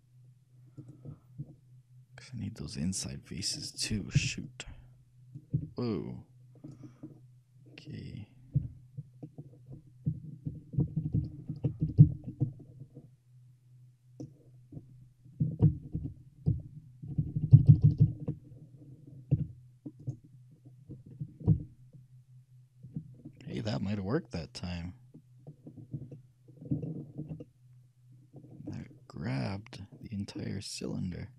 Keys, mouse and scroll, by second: 1.0-3.0 right drag, 3.8-6.2 middle drag, 4.3 c, 6.9-8.5 right drag, 7.3-8.9 middle drag, 8.7 c, 8.9-9.4 scroll down 1, 9.4-9.8 scroll up 1, 20.2-22.0 right drag, 21.6 ctrl+KP_Add, 23.5-25.5 middle drag, 25.9-27.3 middle drag, 27.5-30.2 shift+middle drag.